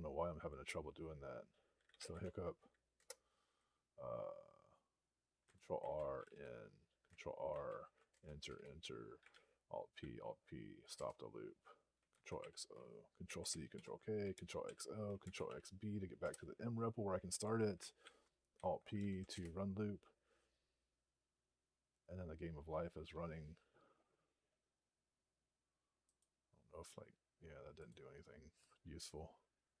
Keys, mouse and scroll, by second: 1.5-2.4 typing, 2.8 Return, 5.7 ctrl+r, 5.7-6.6 typing, 7.4 ctrl+r, 8.0 Return, 9.2 alt+p, 10.8 Return, 13.6 ctrl+k, 16.1 Return, 17.9 alt+p, 18.8 alt+n, 19.2 Return, 27.8 Return.